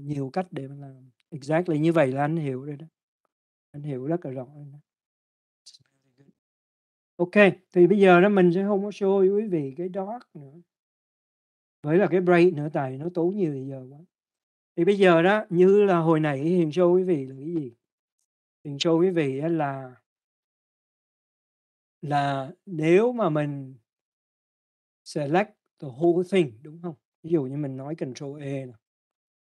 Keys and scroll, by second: 29.1 ctrl+a.